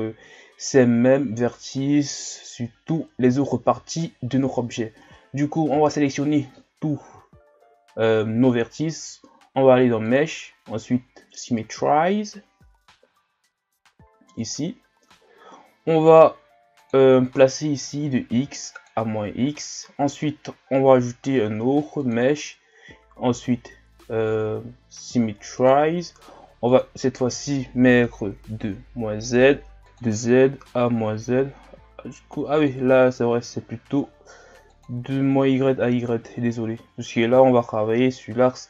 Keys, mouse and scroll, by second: 0.4-1.4 scroll up 1, 3.4 shift+scroll up 2, 5.0 a, 5.7 a, 6.8-7.5 ctrl+scroll down 1, 7.5-10.0 shift+scroll up 1, 10.0-13.1 drag, 16.8-19.8 drag, 22.0-25.1 drag, 26.7-31.0 drag, 32.6-35.6 drag, 37.5 shift+scroll up 1.